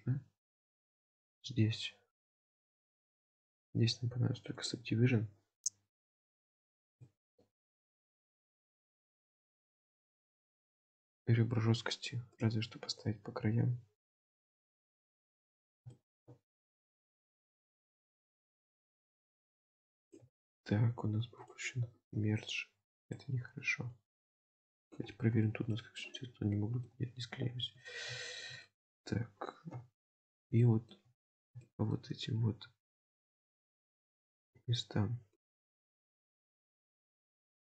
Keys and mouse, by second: 2.3 shift+middle click, 3.1-4.8 drag, 6.5 click, 7.0-7.4 shift+middle drag, 8.3-8.8 middle drag, 9.7-10.1 middle drag, 11.9 ctrl+r, 15.1 shift+middle click, 16.0 shift+middle click, 20.3 ctrl+z, 21.4 click, 25.5 shift+middle click, 26.0 shift+middle click, 26.6 shift+middle click, 28.3 shift+middle click, 28.7 middle click, 29.7 KP_1, 30.6 shift+middle click, 31.7 shift+middle click, 32.9 ctrl+r.